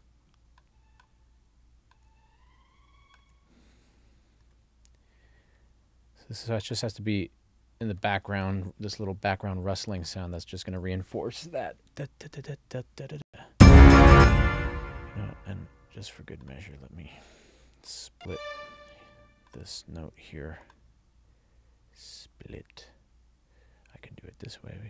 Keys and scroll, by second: 13.3 space.